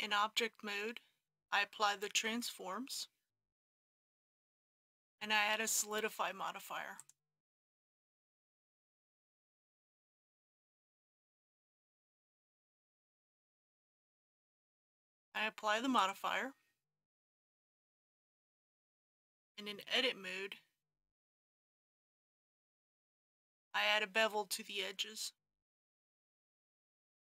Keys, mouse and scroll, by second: 0.1 Tab, 2.3 ctrl+a, 3.4-10.9 drag, 12.6 KP_Decimal, 12.9 KP_0, 13.1 KP_5, 15.1 click, 18.5 Tab, 19.9 2, 20.8 2, 22.3-24.6 middle drag, 24.6-26.5 scroll up 1, 26.6 alt+a.